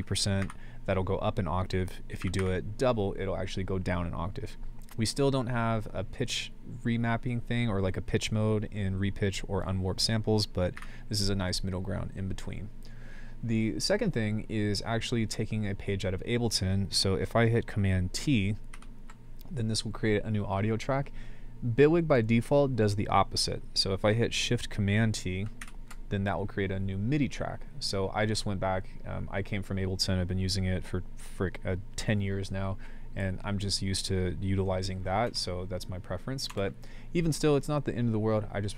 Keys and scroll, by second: 0.0-0.4 typing, 2.2 typing, 10.8 [, 18.7 super+t, 25.6 shift+super+t, 35.3 BackSpace, 36.5 BackSpace.